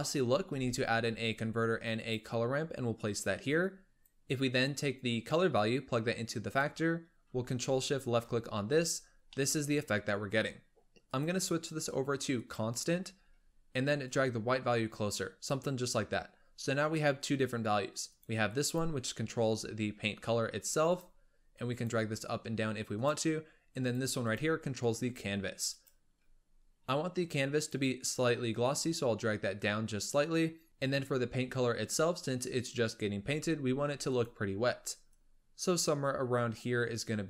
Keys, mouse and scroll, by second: 0.5 shift+a, 3.5-8.0 drag, 8.9-9.3 scroll down 2, 9.3-10.1 middle drag, 10.1-11.0 scroll up 3, 11.0-13.1 drag, 13.1-14.0 scroll up 4, 14.0-16.3 drag, 16.3-18.0 scroll down 1, 18.0 click, 20.5 click, 23.7 click, 27.5-30.6 drag, 30.7-33.0 drag, 34.0 click.